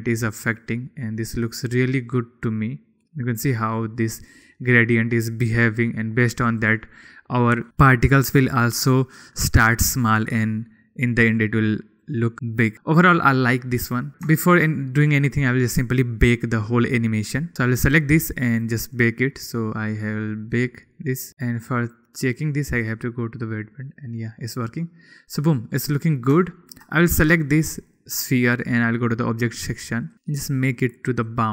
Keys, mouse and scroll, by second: 2.0-5.8 middle drag, 7.2 click, 12.7 click, 14.9-15.7 shift+middle drag, 19.1-21.0 middle drag, 22.3-23.5 drag, 24.7 middle click, 26.3 middle click, 27.0 shift+middle drag, 27.6 middle click, 29.7 middle click, 31.0-31.5 middle drag.